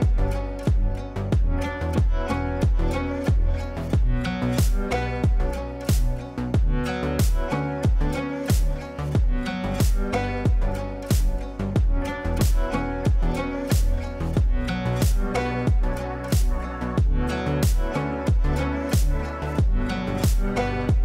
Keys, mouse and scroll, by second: 0.0-0.6 typing, 1.9 Caps_Lock, 2.0-3.1 typing, 3.4 ctrl+space, 4.2 F2, 4.5-5.1 drag, 11.2 ctrl+right click, 12.1 ctrl+space, 12.7 ctrl+a, 13.5-15.1 typing, 16.1-18.0 typing.